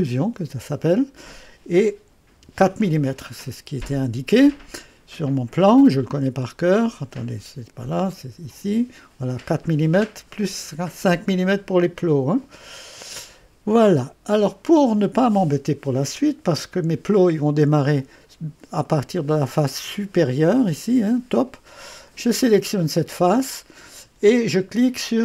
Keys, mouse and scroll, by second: 0.0 click, 2.4 4, 3.9 click, 6.3-7.6 drag, 8.1 click, 13.0 click, 18.8 right click, 22.2 click.